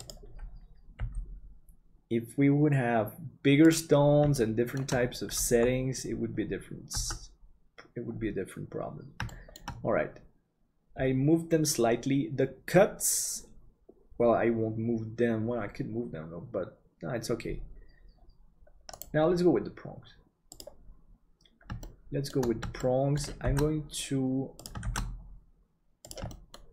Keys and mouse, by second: 1.0 g, 4.3 shift+middle click, 7.0 Tab, 9.2 middle click, 20.5 click, 21.8 shift+middle click, 22.7 shift+middle click, 23.4 shift+d, 26.4 middle click.